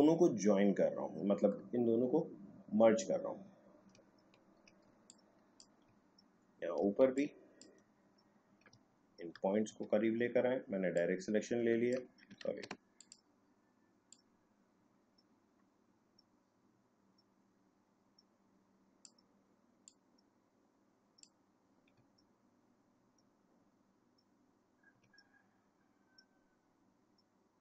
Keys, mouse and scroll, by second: 4.2 alt+scroll down 1, 4.8 space, 5.0 click, 5.5 space, 6.2-7.0 alt+scroll up 2, 7.0 space, 7.2 click, 7.5 space, 8.8 alt+scroll up 1, 9.7 a, 10.9-12.4 drag, 12.4 ctrl+z, 13.0-22.1 drag, 22.1 alt+scroll down 1, 24.3 alt+scroll up 1.